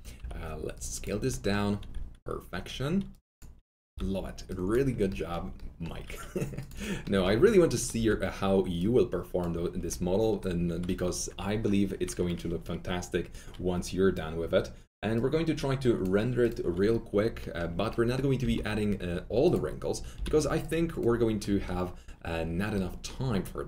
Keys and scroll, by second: 0.1 r, 3.8 r, 7.9 alt+r, 18.3 s, 20.1 s.